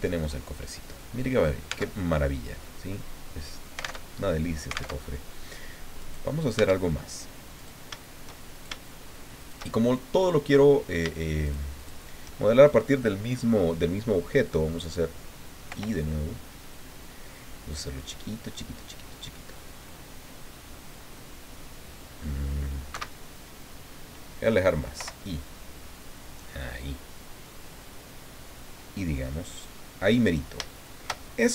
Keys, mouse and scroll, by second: 1.3 scroll down 2, 1.7 Tab, 2.0-4.0 drag, 4.0 alt+Tab, 4.9 alt+Tab, 6.0 right click, 6.5 Tab, 7.6 right click, 8.5 shift+right click, 9.4 shift+right click, 9.7-10.1 shift+scroll up 1, 10.2 click, 11.4 shift+right click, 11.8 shift+right click, 15.7 i, 22.9 Escape, 25.0 i, 29.5 click, 30.3 scroll up 1, 30.7 shift+click, 31.2 shift+middle click, 31.4 shift+scroll up 2.